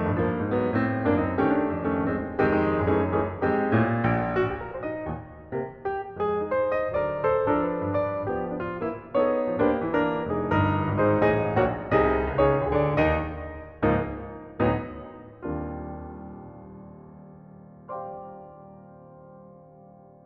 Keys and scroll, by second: 6.9 space, 10.5 shift+space, 12.9 shift+space, 15.8 shift+space, 18.0 shift+space.